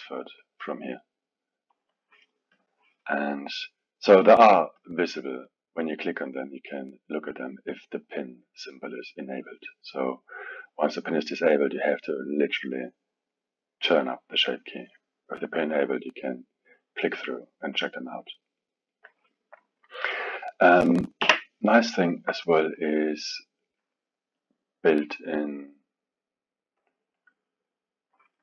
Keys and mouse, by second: 1.7-4.8 drag, 5.8 click, 6.3 click, 6.9-11.7 drag, 11.8-15.5 drag, 16.3 click, 17.2 click, 18.9 drag, 20.1 click, 21.2 Delete, 21.9-22.4 alt+middle drag, 22.4 click, 23.6 drag, 26.8 click.